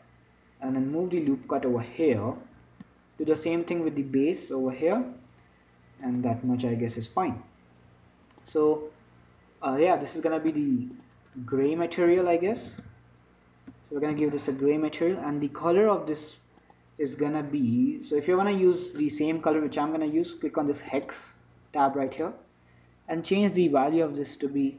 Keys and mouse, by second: 3.6 ctrl+r, 7.3-10.7 drag, 11.2-15.6 drag, 16.9-18.8 drag.